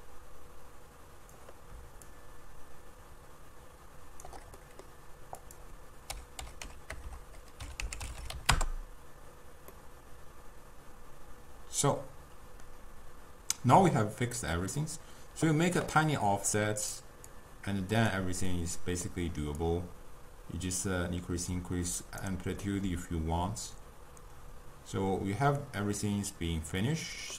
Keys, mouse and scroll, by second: 2.1-4.6 shift+drag, 4.6 middle click, 5.5-7.0 drag, 7.0 BackSpace, 8.2 0, 9.7 scroll down 1, 9.8-12.8 middle drag, 17.1-18.1 drag, 18.5-19.7 middle drag, 19.7-22.7 drag, 22.7-25.7 middle drag.